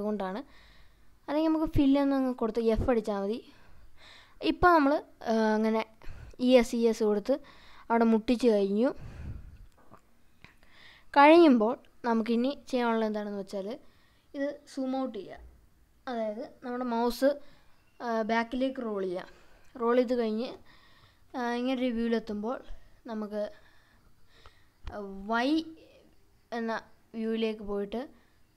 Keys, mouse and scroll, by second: 0.6 e, 0.8 s, 2.9 click, 3.4 e, 3.8 s, 5.5 click, 5.9-7.8 scroll up 10, 8.3-11.8 scroll up 14, 11.8-12.8 scroll down 5, 12.8-14.1 middle drag, 14.2-15.2 scroll up 4, 15.2-17.0 scroll down 12, 17.3 scroll down 3, 17.8 middle click, 18.5 scroll up 1, 19.1 scroll up 1, 19.6-20.6 middle drag, 21.8 scroll up 2, 24.1-24.6 scroll down 3, 25.9 click.